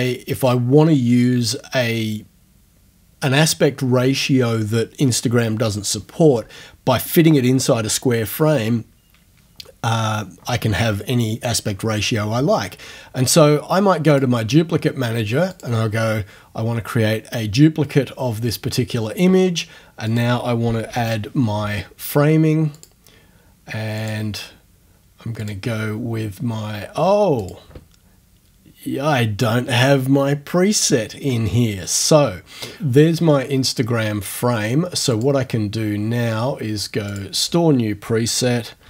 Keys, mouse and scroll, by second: 14.1 click, 15.6 click, 20.1 click, 20.6-21.5 typing, 22.8 click, 24.0 click, 25.5 click, 27.4 click, 35.2 click, 37.1 click, 38.6-38.8 typing.